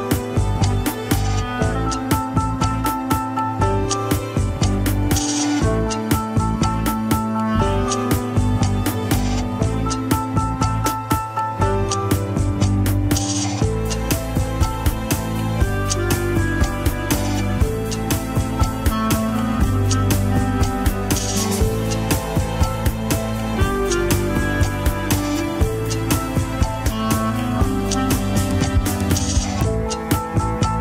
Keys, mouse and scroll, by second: 0.0 alt+z, 0.1-0.5 scroll up 2, 0.5 g, 1.1 scroll down 4, 1.4 middle click, 2.1 KP_3, 2.5 ctrl+Tab, 2.8 alt+z, 3.1 shift+click, 3.9 shift+h, 4.3 alt+z, 4.5 shift+middle drag, 4.7 scroll up 1, 5.1 click, 5.7 Tab, 6.3 shift+z, 7.4 alt+z, 7.6 click, 8.3 alt+z, 9.5-9.9 scroll down 1, 9.9 g, 10.8 middle click, 11.3 g, 12.1 alt+z, 12.3 click, 12.5 alt+z, 12.9 g, 13.9 KP_1, 14.1-14.9 scroll down 3, 14.9 ctrl+s, 15.0 scroll up 1, 15.3 alt+z, 15.6-17.1 shift+middle drag, 17.1 alt+z, 17.6 alt+z, 18.0 click, 19.0 click, 19.2 alt+z, 19.3 KP_3, 19.5-20.0 scroll up 2, 20.0 shift+middle click, 20.3 alt+z, 20.7 g, 22.5 click, 23.1 g, 24.4 scroll down 1, 24.4 KP_1, 24.7 scroll up 3, 24.9 alt+z, 25.3 shift+middle click, 26.1 alt+z, 26.8 click, 27.2 alt+z, 27.4 KP_3, 27.9 KP_1, 28.2 KP_3, 28.5 g, 29.7 KP_1, 30.7 g.